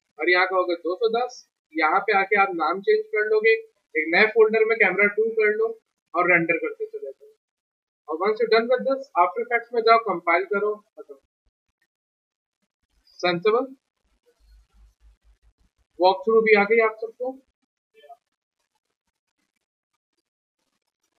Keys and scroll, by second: 13.1 ctrl+s, 15.3 ctrl+s.